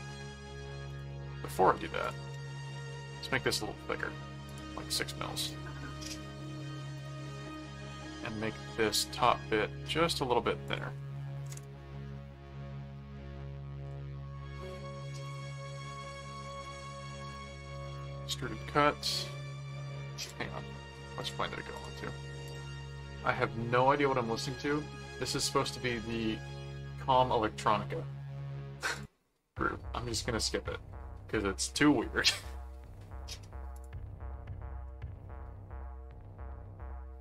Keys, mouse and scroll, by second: 0.9 click, 2.0 click, 2.3 middle click, 3.5 middle click, 4.5 click, 6.2 middle click, 6.9 click, 7.8 click, 7.8 middle click, 10.6 click, 12.1-13.3 middle drag, 13.8 middle click, 14.6 ctrl+4, 15.2 ctrl+click, 16.0-17.6 typing, 18.0 Return, 20.2 click, 21.2 click, 22.4 click, 28.9 click, 33.7 click.